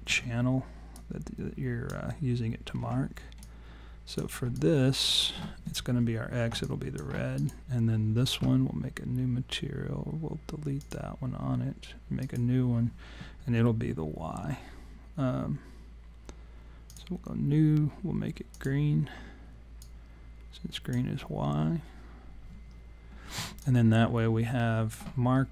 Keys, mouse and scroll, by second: 0.1 w, 1.0 click, 2.8 r, 3.4 click, 4.6 alt+click, 6.6 alt+click, 7.4 click, 10.8 click, 12.2 click, 16.9 click, 18.5 click, 23.6 alt+click, 25.4 scroll up 1.